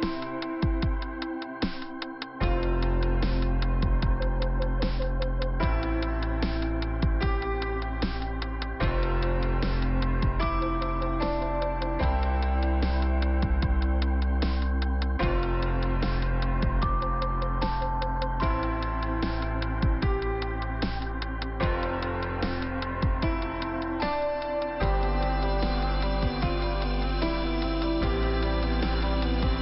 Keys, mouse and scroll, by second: 3.1 click, 5.1 click, 7.7 click, 7.9 click, 8.3 right click, 8.4 right click, 8.8 click, 8.9 click, 10.4 click, 10.4 click, 13.2 click, 14.1 right click, 15.0 scroll down 1, 16.2 f, 17.9 click, 21.6 click, 23.2 click, 25.4 click, 26.9 click, 27.0 click, 27.5 click, 28.5 click, 28.6 click, 29.0 click, 29.1 double click.